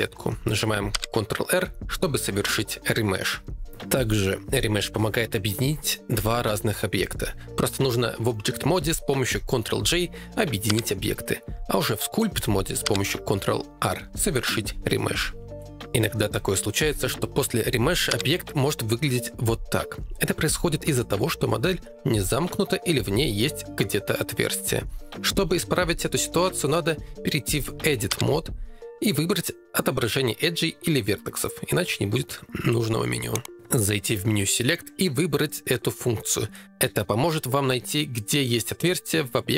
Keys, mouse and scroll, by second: 0.9 ctrl+r, 5.0 ctrl+Tab, 9.6 shift+click, 10.7 ctrl+j, 12.0 ctrl+Tab, 12.9 ctrl+r, 13.7 shift+click, 14.4 shift+click, 16.1 ctrl+Tab, 16.1 r, 18.1 ctrl+r, 22.4 middle click, 25.8 ctrl+z, 26.4 ctrl+Tab, 27.8 Tab, 28.8 click, 33.5-35.2 drag.